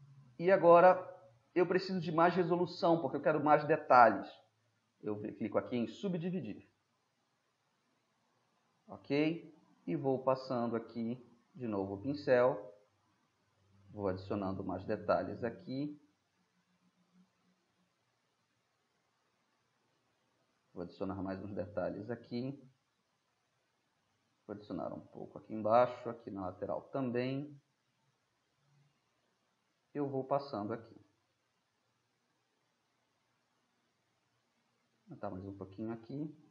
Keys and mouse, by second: 0.3-3.0 middle drag, 6.6-7.6 drag, 7.6-9.8 middle drag, 10.2-19.6 drag, 19.6-22.1 middle drag, 23.2 middle drag, 23.4 drag, 23.5 middle drag, 23.6-24.0 drag, 24.0 middle drag, 24.4-25.0 middle drag, 25.0-28.5 drag, 28.5-30.8 middle drag, 30.8-31.4 drag, 31.4-33.5 middle drag.